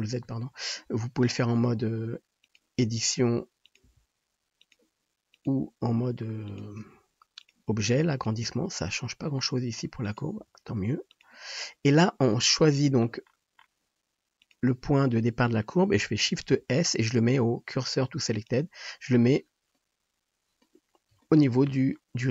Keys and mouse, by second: 0.3 ctrl+z, 1.6 Tab, 2.5 click, 3.0 r, 3.9 g, 5.3 click, 5.5-11.6 middle drag, 5.8 g, 6.8 r, 7.7 g, 8.4 s, 10.4 r, 11.6-14.5 drag, 14.5-20.5 middle drag, 16.6 shift+s.